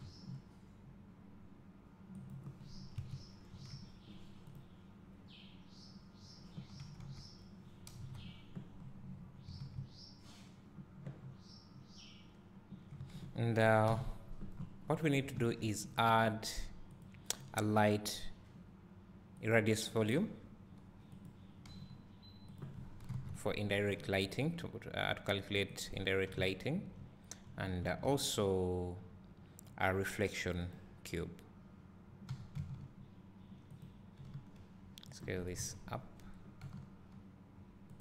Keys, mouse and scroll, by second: 0.8-1.8 scroll up 1, 1.8-3.3 scroll up 1, 3.3 scroll up 1, 8.0 KP_0, 9.7 scroll down 1, 10.3 a, 11.8 scroll down 1, 14.0 KP_7, 15.5 shift+a, 20.2 s, 21.6 click, 21.8 g, 23.0 click, 23.1 KP_1, 24.0 g, 26.0 click, 26.4 `, 32.3 g, 34.2 click, 34.3 s, 35.2 click, 35.6 KP_1, 37.1 g.